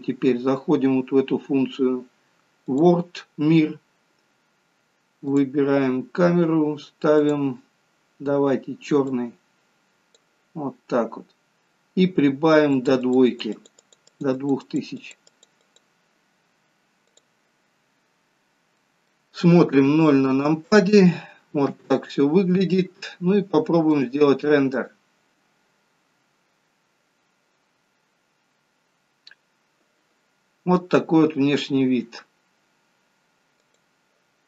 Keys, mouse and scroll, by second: 2.8 click, 5.4 click, 7.3 click, 12.8 click, 13.1 click, 13.4 click, 13.7 click, 13.9 click, 14.2 click, 14.5 click, 14.8 click, 15.1 click, 15.4 click, 15.7 click, 17.2 click, 18.3 scroll down 2, 18.8 middle click, 19.8 KP_0, 21.8 KP_0, 24.0 click.